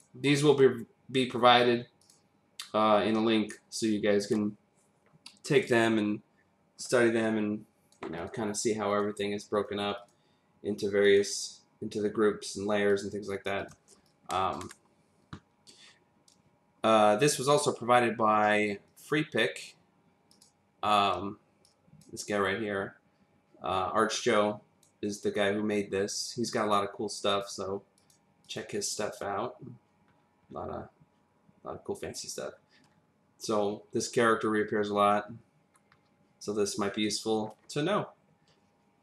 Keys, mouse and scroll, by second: 2.0 click, 7.2 click, 8.1 click, 8.9 click, 9.6 click, 9.9 click, 11.0 click, 12.9 click, 13.6 click, 13.9 space, 14.0 click, 14.5 space, 14.6 space, 17.4 click, 19.2 click, 20.3 click, 21.6 click, 24.6 click, 27.0 click, 27.3 click, 27.9 click, 28.4 click, 30.1-30.5 scroll down 3, 31.1-32.5 scroll down 5, 32.5-33.0 scroll up 2, 34.4 scroll up 1, 35.2-36.2 scroll down 5, 37.2 scroll down 2.